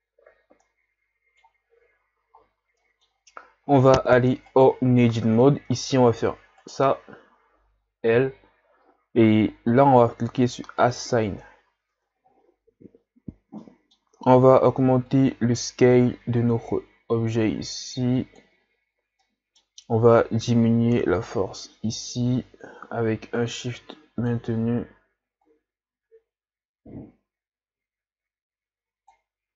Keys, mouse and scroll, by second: 0.7-4.5 middle drag, 4.5 right click, 5.2 Tab, 6.6 right click, 8.1 l, 11.0-12.0 drag, 12.0 Tab, 15.2-19.8 drag, 19.8 middle click, 20.3-23.7 drag, 25.6-28.4 drag.